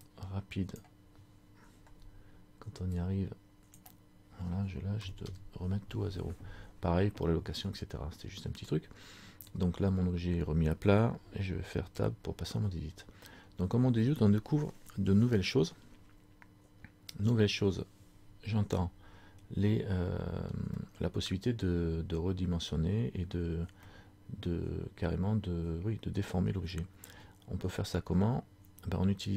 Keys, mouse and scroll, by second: 12.0 Tab, 20.9 middle click, 22.8 middle click, 24.0 middle click.